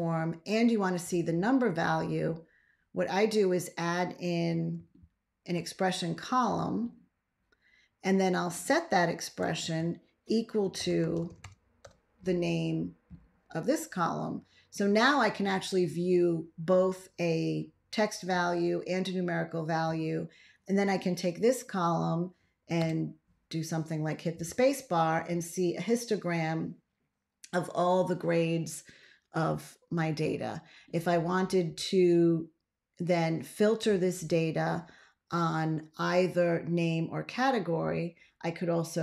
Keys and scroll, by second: 4.6 ctrl+a, 9.5 ctrl+x, 10.4-11.8 typing, 22.7 space.